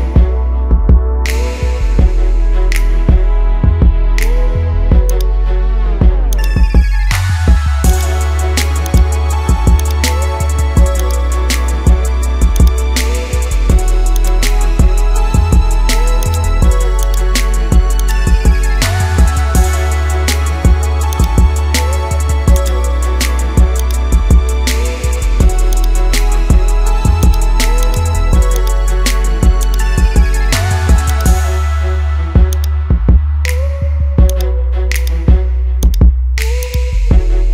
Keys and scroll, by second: 1.8 ctrl+z, 7.2 ctrl+z, 15.2 ctrl+z.